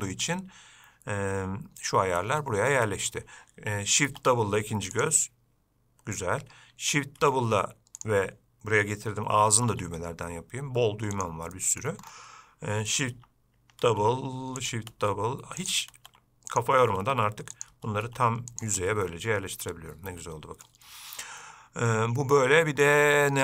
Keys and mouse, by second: 0.1-2.6 drag, 3.0-3.4 middle drag, 4.3 shift+d, 7.4 shift+d, 10.0 s, 11.8 middle drag, 14.1 shift+d, 19.1-20.9 middle drag.